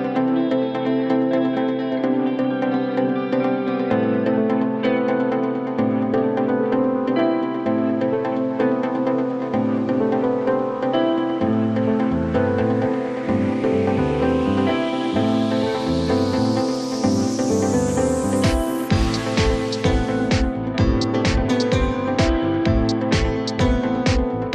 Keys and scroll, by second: 2.2 space, 5.2 ctrl+g, 5.8 c, 6.1 Escape, 17.2 Escape, 17.5 F2.